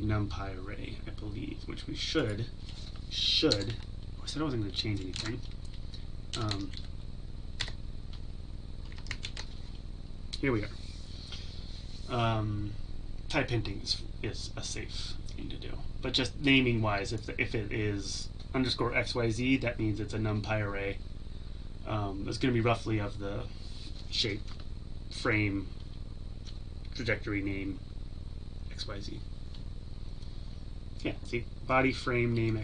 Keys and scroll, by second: 7.6 Tab, 9.2 ctrl+s.